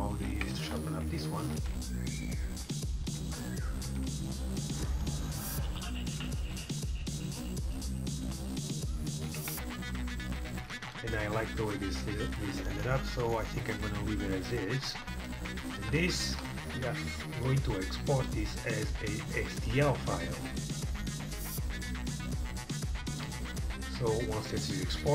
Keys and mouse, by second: 0.2 Tab, 2.6 ctrl+r, 3.3 ctrl+z, 3.7 ctrl+r, 6.2 ctrl+z, 6.5 ctrl+r, 8.3 ctrl+r, 9.5 Tab, 17.4-19.4 drag, 22.3-23.8 drag.